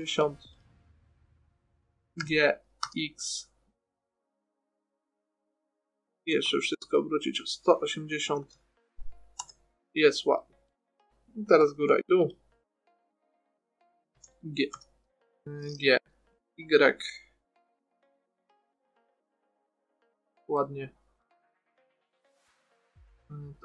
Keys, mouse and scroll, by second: 0.9-3.0 drag, 2.6 g, 6.3-6.7 scroll up 1, 6.7 a, 6.8 a, 8.6 r, 10.3-11.4 middle drag, 11.8 middle click, 14.5 g, 21.0 middle click, 21.3-22.3 middle drag, 22.3-23.6 right drag.